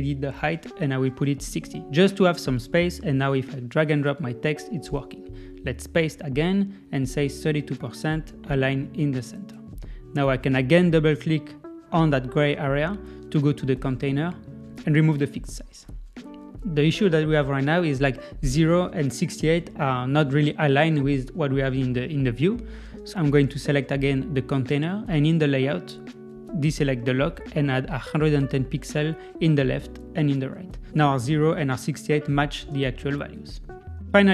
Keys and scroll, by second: 2.3 Return, 6.3 super+v, 6.8 Left, 7.3 Right, 30.7 Tab, 31.2 Left.